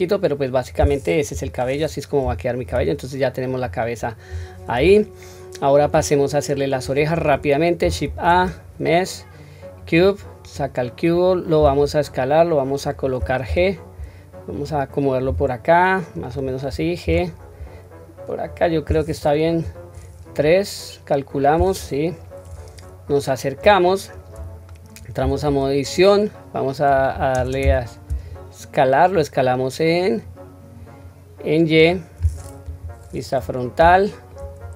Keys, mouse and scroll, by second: 1.3 KP_1, 2.2 shift+middle click, 2.7 click, 3.6-4.0 scroll down 1, 4.2-4.7 scroll up 1, 4.7 scroll up 1, 4.9-5.7 shift+middle drag, 8.0 shift+a, 10.5-11.0 scroll down 1, 11.5 s, 13.4 g, 19.4 KP_3, 22.4 scroll up 1, 23.7-24.1 shift+middle drag, 23.7-24.1 scroll up 3, 24.3 scroll up 1, 25.1 Tab, 27.3 shift+space, 29.1-31.7 drag, 32.6 KP_1, 33.2-33.7 scroll down 1, 33.9 shift+middle click, 33.9-34.3 scroll down 1, 34.5 scroll up 1.